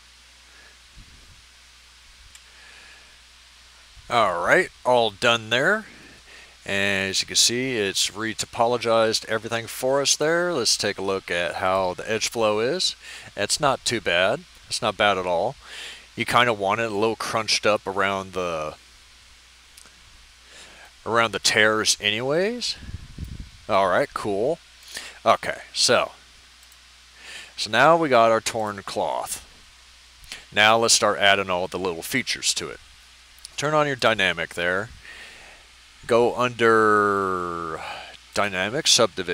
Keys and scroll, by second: 2.3 F9.